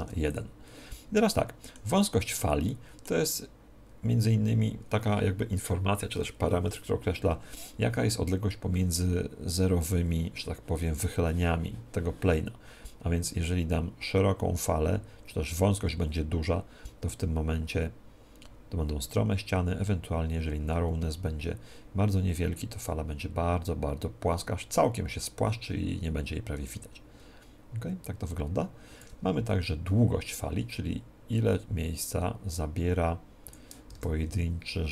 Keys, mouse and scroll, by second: 1.1-4.6 middle drag, 13.2-33.9 drag, 33.9 alt+a.